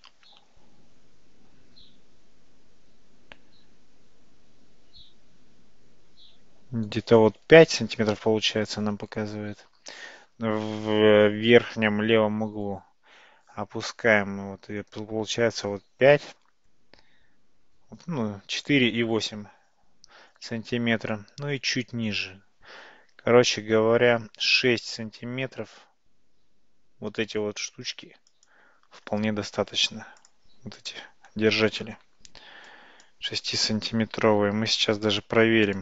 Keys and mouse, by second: 32.0 Tab, 32.8 click, 34.3 g.